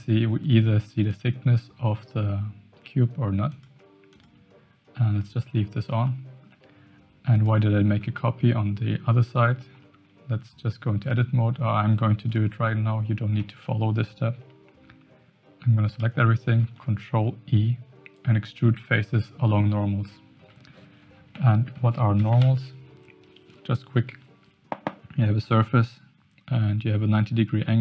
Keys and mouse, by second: 0.4 click, 1.0 click, 3.5 click, 4.1 click, 6.0 shift+middle click, 7.3 click, 8.1 shift+middle drag, 9.7 Tab, 11.0 click, 12.0 3, 13.4 a, 16.6 alt+e.